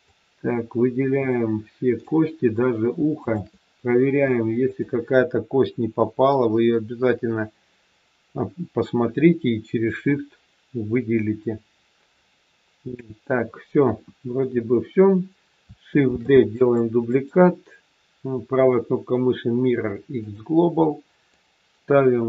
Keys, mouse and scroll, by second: 3.2 shift+click, 6.4 middle click, 13.7 KP_1, 16.0 shift+d, 17.0 right click, 21.2 click.